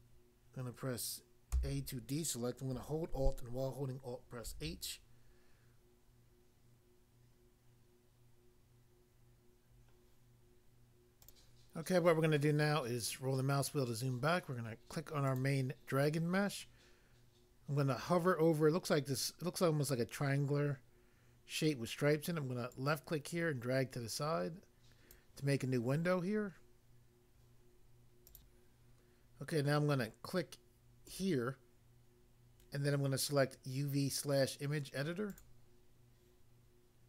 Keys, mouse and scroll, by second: 1.5 a, 4.5 alt+h, 11.2 click, 11.4 click, 12.7-13.1 scroll down 1, 15.3 click, 15.4 click, 22.8 click, 25.2 click, 28.2 click, 28.3 click, 31.0 click, 31.2 click, 35.2 click, 35.4 click.